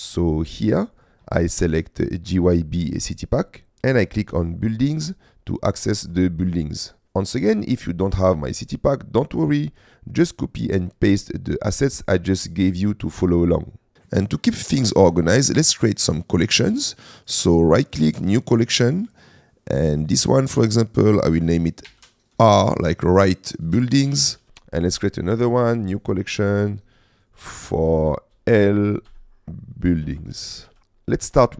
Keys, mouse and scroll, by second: 1.0-3.0 drag, 4.7 click, 13.9 middle click, 14.6 shift+middle drag, 17.2 click, 17.6 right click, 20.0 click, 24.5 Delete, 25.3-26.5 right drag, 27.2 click, 31.2 middle click.